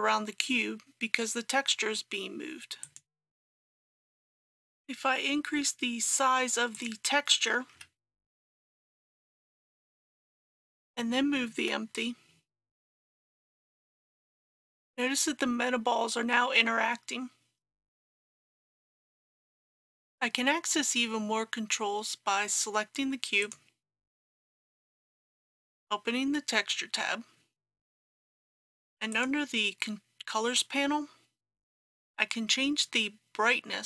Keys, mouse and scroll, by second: 2.8 click, 4.1 KP_3, 6.8 click, 7.7 KP_5, 10.4-11.5 drag, 11.6 g, 19.7-33.8 drag.